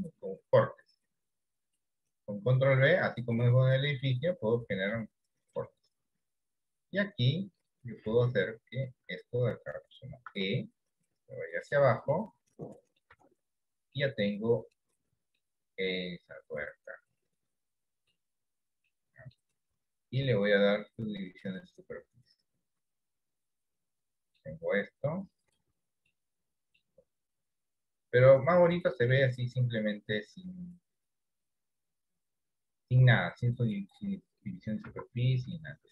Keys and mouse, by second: 1.8 click, 3.0-4.1 middle drag, 5.1 shift+middle click, 6.8 click, 10.3 e, 12.2 middle click, 13.2 Tab, 14.1 middle click, 15.5-18.2 middle drag, 18.9 middle click, 20.2-21.6 drag, 23.8 middle click, 26.2 middle click, 28.0 click, 28.9 middle click, 30.1 middle click, 31.6-33.8 middle drag, 34.9 Tab, 35.2 middle click.